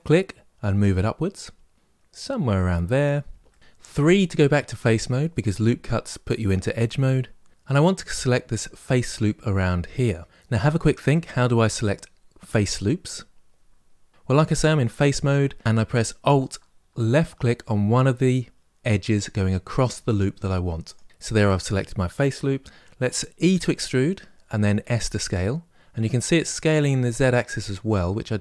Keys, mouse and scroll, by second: 2.4-2.7 scroll down 1, 2.7-3.2 scroll up 1, 3.2 middle click, 3.8 3, 20.6 alt+click, 22.6 s, 23.2 e.